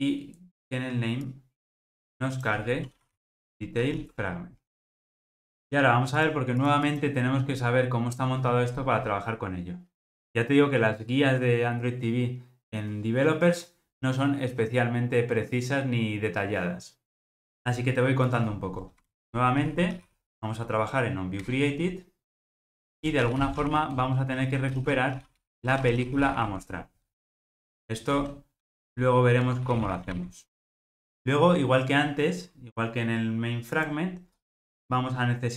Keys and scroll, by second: 21.5 Return, 28.7 alt+Return.